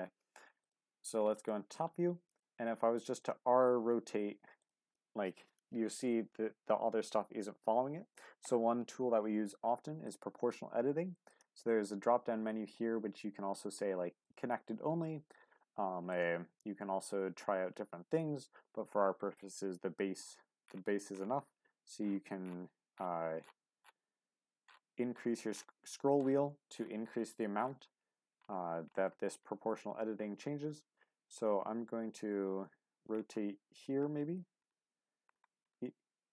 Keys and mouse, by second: 0.6 click, 1.5 shift+middle click, 2.4 r, 3.2 click, 3.4 g, 4.6 click, 8.2 ctrl+z, 8.7 ctrl+z, 10.0 click, 11.3-20.0 drag, 20.0 r.